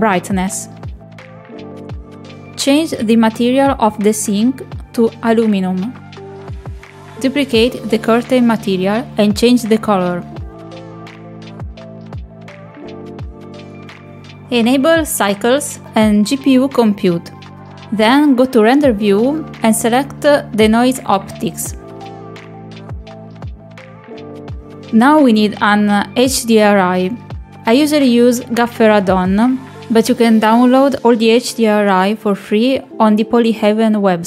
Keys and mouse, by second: 0.0 click, 0.9 click, 4.7 click, 6.6 middle click, 8.0 click, 12.6 click, 13.2 click, 14.9-16.0 drag, 16.9 click, 24.1 click, 24.8 click, 27.2 click.